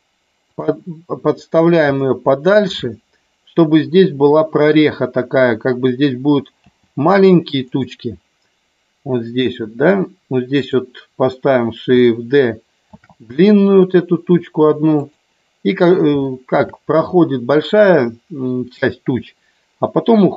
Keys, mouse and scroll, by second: 0.5 click, 2.0 shift+middle click, 6.6 g, 7.6 click, 10.5 click, 12.9 shift+d, 14.8 click, 16.3 shift+middle click.